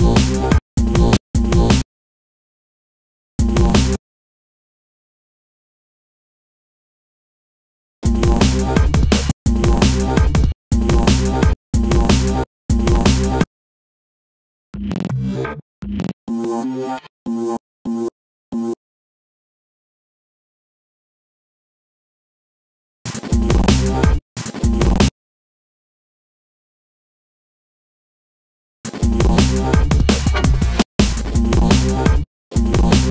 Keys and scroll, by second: 1.7 super+space, 3.8 super+space, 4.3 super+i, 4.9 super+BackSpace, 6.4 BackSpace, 8.5 super+space, 9.1 space, 14.3 space, 22.6 space, 28.4 space.